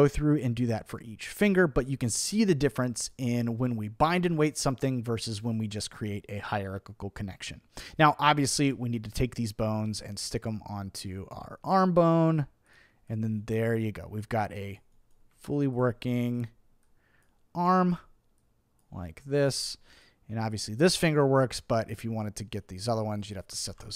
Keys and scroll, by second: 23.7 super+z.